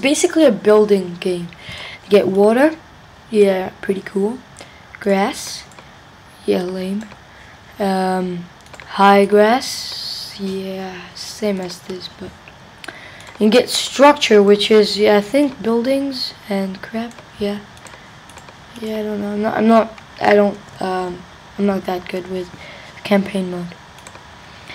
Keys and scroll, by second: 20.7 Down, 21.1 Up, 22.2 Left.